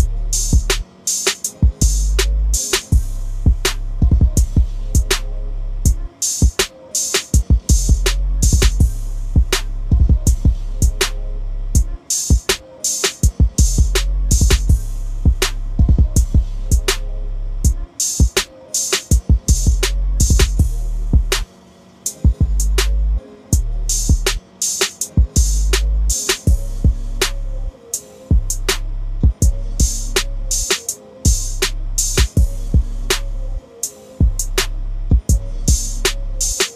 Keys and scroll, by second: 3.5-5.1 typing, 25.8 typing.